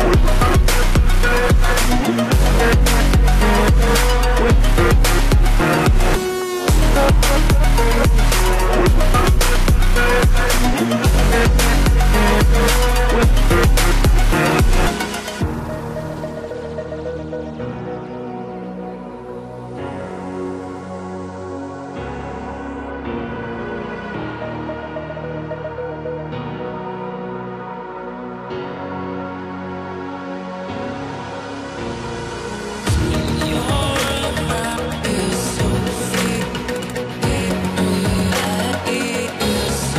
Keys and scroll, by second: 7.7 ctrl+=.